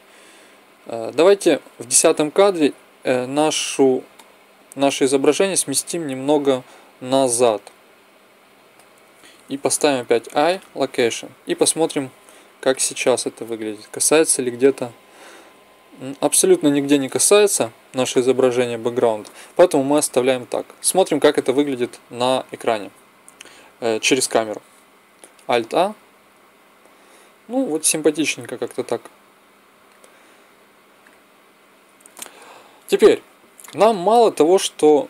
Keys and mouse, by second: 2.1-4.0 drag, 5.3 middle click, 6.2 click, 9.6 i, 14.1 Left, 14.5 Left, 14.9 Left, 15.3 Left, 15.9 Left, 20.1 click, 24.0 KP_0, 25.5 alt+a, 28.4-29.9 drag, 32.2 Escape, 32.3 click.